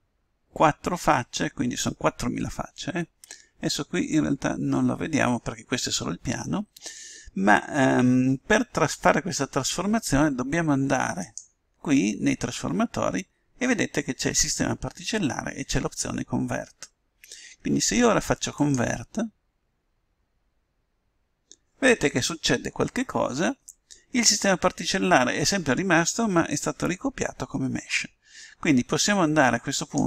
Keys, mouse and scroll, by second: 12.4-14.1 drag, 19.9-21.3 drag.